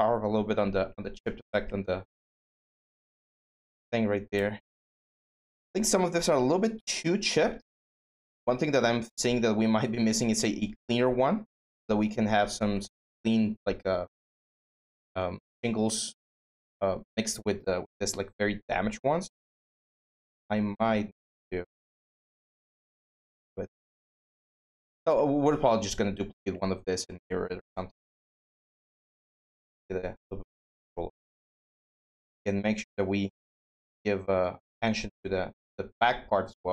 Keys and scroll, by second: 2.7-3.7 typing.